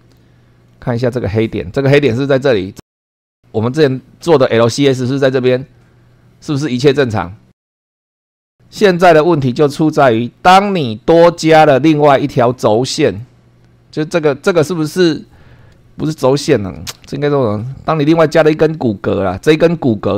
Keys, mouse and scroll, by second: 0.6-1.0 scroll up 2, 8.4 click, 9.2 click, 10.4 click, 11.4-11.8 scroll down 1, 13.0 click, 16.0 shift+middle click, 17.0-17.4 shift+scroll down 2.